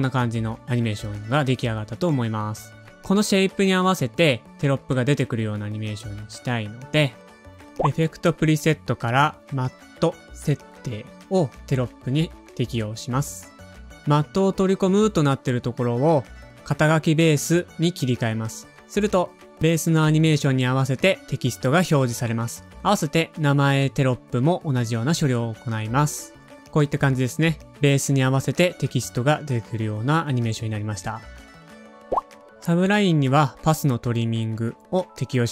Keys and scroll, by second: 7.0 space, 8.8-9.8 typing, 21.4 super+c, 21.4 typing, 22.1 super+v, 26.6 0, 27.8 space, 29.8 space, 32.1 Home.